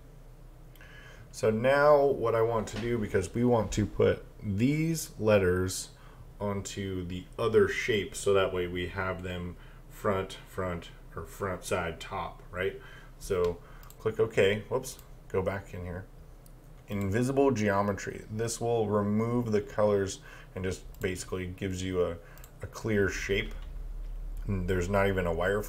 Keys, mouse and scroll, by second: 13.8 click, 21.0 click.